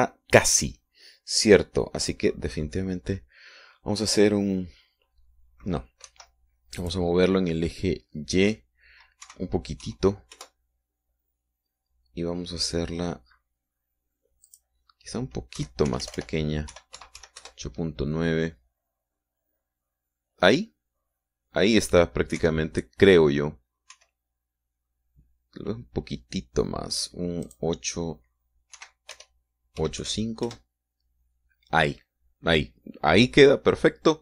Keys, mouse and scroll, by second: 3.4 click, 7.5 Escape, 8.2 click, 10.6 Right, 11.8 KP_Enter, 15.9 click, 17.0 Right, 17.3 BackSpace, 18.2 KP_8, 18.4 KP_Decimal, 18.6 KP_9, 18.8 KP_Enter, 23.8 KP_1, 25.4 KP_3, 28.9 click, 30.2 Right, 30.6 BackSpace, 31.4 KP_5, 31.9 KP_Enter.